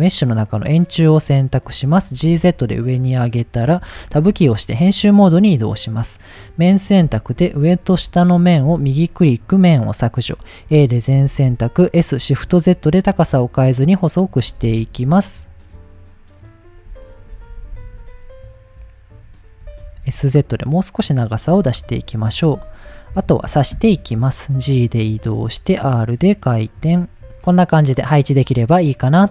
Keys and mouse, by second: 2.0 g, 2.2 z, 2.9 click, 4.1 Tab, 5.4 click, 6.5 middle click, 7.2 shift+click, 7.8 middle click, 8.1 shift+middle click, 8.8-9.8 right drag, 10.1 middle click, 10.7 a, 11.2 s, 12.2 shift+z, 13.7 click, 14.4 s, 14.8 shift+z, 16.4 click, 17.0 shift+middle click, 17.5 s, 17.8 shift+z, 19.1 click, 19.6 s, 20.0 z, 21.2 click, 21.5 Tab, 22.0 middle click, 23.1 KP_1, 24.0 g, 25.1 click, 25.4 r, 26.6 click, 26.8 g, 27.2 y, 27.2 x, 27.4-27.8 middle drag, 28.6 middle click.